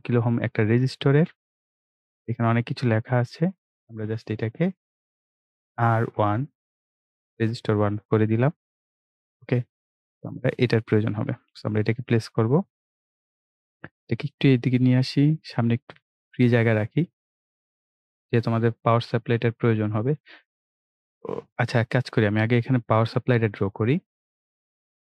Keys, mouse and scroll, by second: 0.5-2.1 drag, 5.1 click, 6.1 BackSpace, 8.5-25.0 drag.